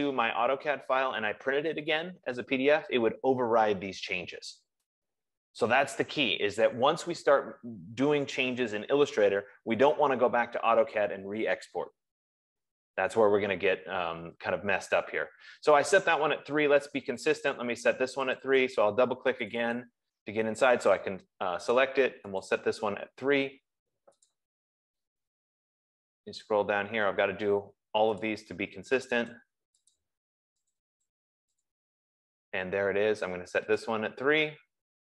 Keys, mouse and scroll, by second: 9.0 F15, 17.7 click, 18.2 click, 19.2 click, 19.9 click, 22.2 click, 22.9 click, 24.7 click, 25.7-27.2 scroll down 13, 28.5 click, 29.5 click, 29.9 click, 30.2 click, 31.0 click, 31.9 click, 34.3 click.